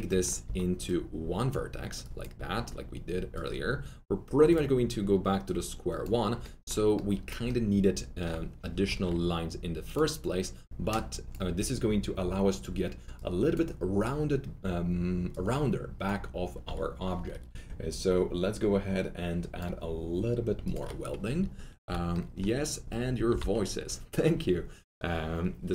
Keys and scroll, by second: 0.4 ctrl+alt+s, 8.8 alt+1, 21.8 alt+1, 21.8 s, 23.2 s.